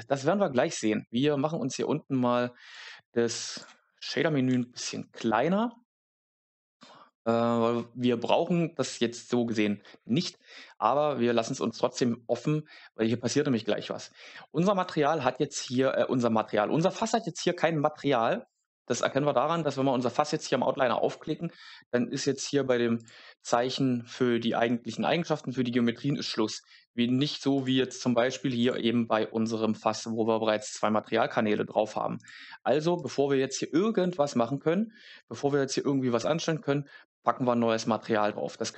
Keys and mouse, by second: 2.6 click, 4.4 n, 14.7 Tab, 15.6 Tab, 18.4 click, 22.9 click, 27.5 click, 28.5 click, 32.1 click.